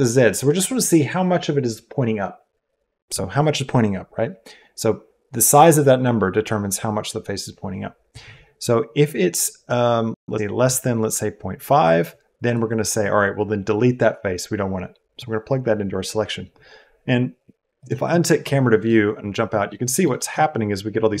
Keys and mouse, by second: 12.5-15.3 drag, 17.7 click, 18.8 middle click, 19.6 middle click, 20.2-21.2 shift+middle drag.